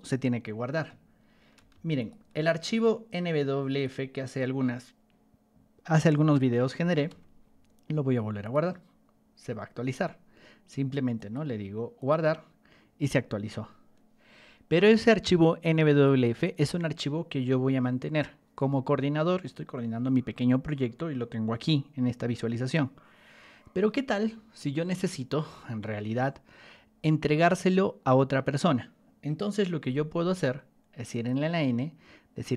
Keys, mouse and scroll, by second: 1.5 ctrl+1, 1.9 click, 2.8-3.8 ctrl+drag, 7.0 Escape, 8.4 click, 11.1 click, 11.9 click, 31.0 click.